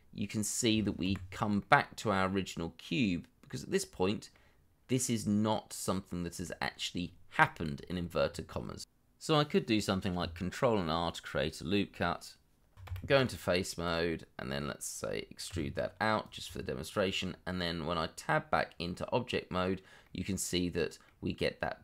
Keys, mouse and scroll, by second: 0.2 middle click, 1.0 1, 1.5 middle click, 8.6 middle click, 9.6 ctrl+r, 10.3 Escape, 10.7 middle click, 12.8 3, 15.5 e, 16.4 Tab, 20.0 middle click.